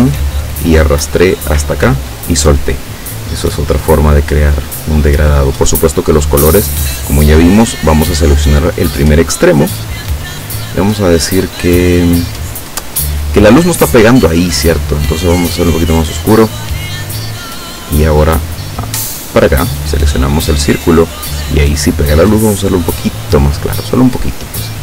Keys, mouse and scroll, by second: 3.9 click, 7.6 click, 16.0 click, 19.3 click, 22.2 click.